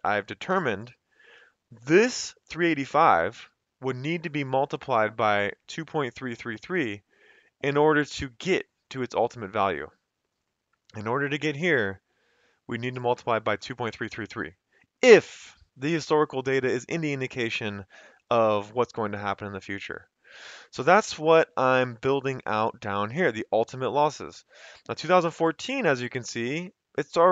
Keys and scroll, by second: 17.4 Escape, 25.2 F2.